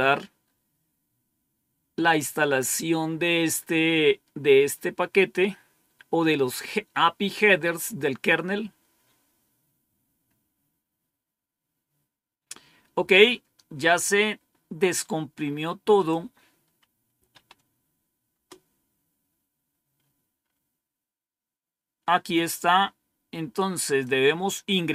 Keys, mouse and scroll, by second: 15.9 click, 16.8-17.7 typing, 18.2 Return, 19.9-21.3 scroll up 1, 22.4-24.0 drag, 24.8-24.9 scroll down 1.